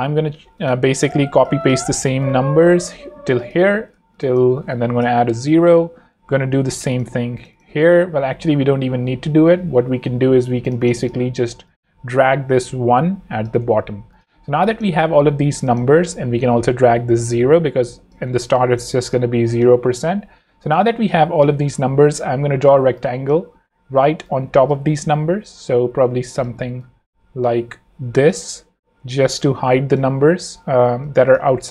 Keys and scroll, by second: 0.1 v, 0.4 z, 1.0 v, 2.4 super+Escape, 3.3 z, 3.9 v, 4.7 super+Right, 5.0 Return, 5.3 0, 5.6 Escape, 8.1 super+Left, 8.9 Left, 9.4 Home, 9.8 v, 10.5 z, 11.2 v, 14.5 shift+z, 15.2 v, 16.0 shift+super+v, 18.4 shift+space, 19.3 space, 21.4 m, 21.9 r, 24.7 space, 26.5 v, 30.2 v, 30.9 alt+z.